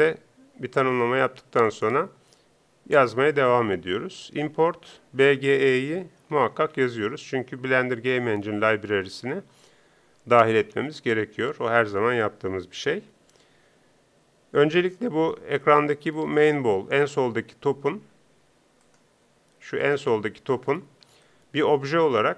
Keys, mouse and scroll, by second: 20.6 middle click.